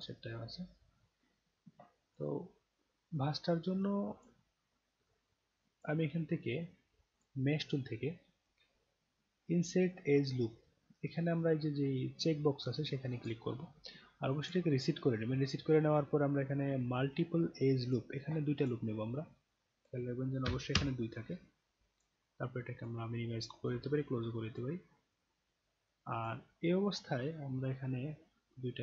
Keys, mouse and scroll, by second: 0.0 click, 2.1 click, 3.2-4.2 alt+drag, 5.1-5.8 alt+drag, 7.1 click, 13.2 click, 14.4 click, 17.8 click, 18.6 click, 19.5 click, 22.0 click, 22.8 click, 24.1 alt+click, 24.9 alt+middle click, 25.9 alt+click, 26.5-26.9 alt+scroll up 1, 27.3 scroll up 2, 28.6 click.